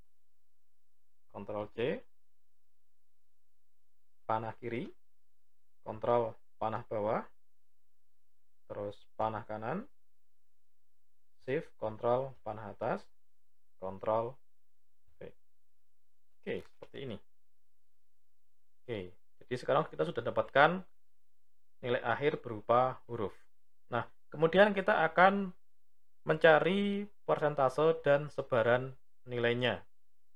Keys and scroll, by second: 1.1 ctrl+c, 4.2 Left, 5.6 ctrl+Down, 9.0 Right, 11.3 ctrl+shift+Up, 13.8 ctrl+v.